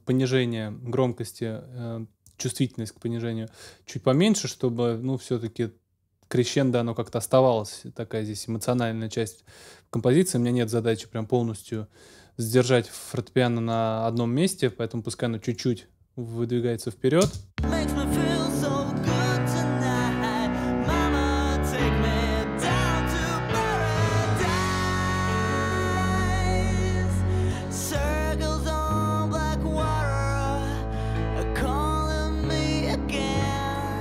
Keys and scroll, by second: 17.2 space.